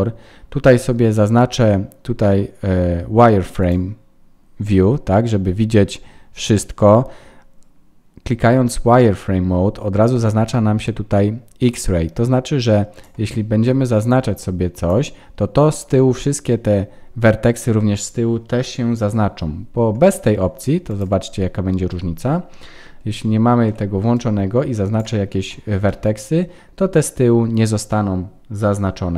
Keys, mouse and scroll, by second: 3.6 click, 12.9 click, 15.9 middle click, 20.0 click, 20.8 click, 21.9 KP_1, 23.2 shift+middle click, 24.1 click, 25.8 middle click.